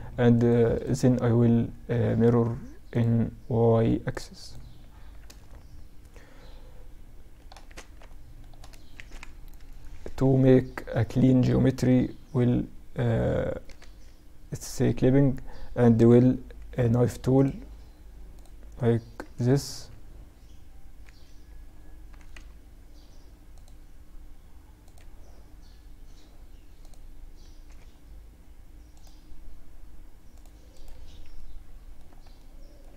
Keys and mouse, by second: 3.2-4.6 drag, 4.4 z, 4.6-6.8 middle drag, 6.8 Tab, 7.6-8.9 middle drag, 8.4 KP_Add, 8.7 KP_Add, 11.1 k, 13.7-15.8 drag, 15.8 k, 21.5 k, 28.0-30.5 drag, 30.5-32.9 middle drag.